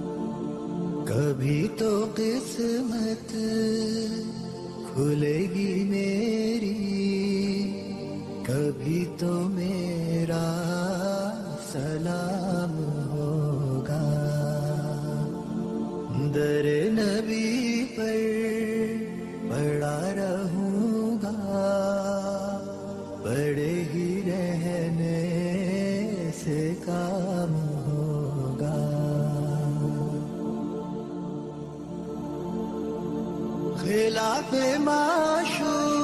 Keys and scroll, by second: 1.1 ctrl+z, 3.5 ctrl+shift+z, 7.7 Escape, 8.1 F4, 18.5 ctrl+z, 25.4 shift+Page_Up, 27.1 shift+F2.